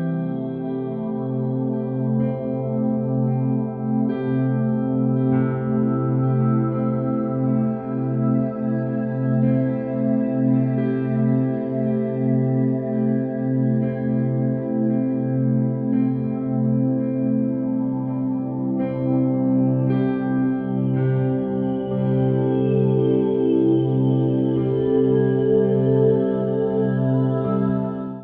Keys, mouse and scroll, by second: 5.3 click, 6.7-7.1 drag, 8.0 click, 13.0 shift+click, 13.9 shift+click, 15.8 ctrl+l, 17.5 click, 18.2 shift+click, 19.0 shift+click, 19.9 ctrl+l, 21.8 click.